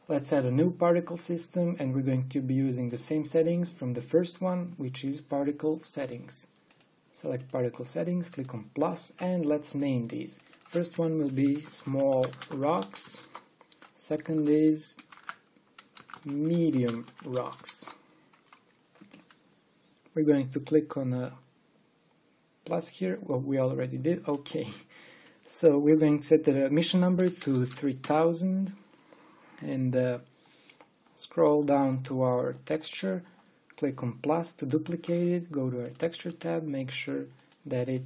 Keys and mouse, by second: 13.9 l, 16.7 shift+m, 18.4 shift+m, 28.3 KP_0, 28.4 KP_0.